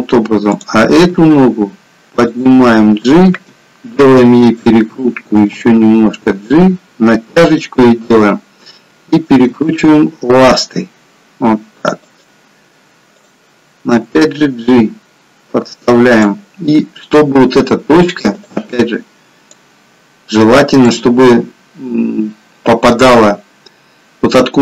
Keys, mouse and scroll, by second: 0.5 click, 1.0 g, 3.5 r, 5.6 g, 8.1 click, 9.5 r, 13.1 click, 13.9 g.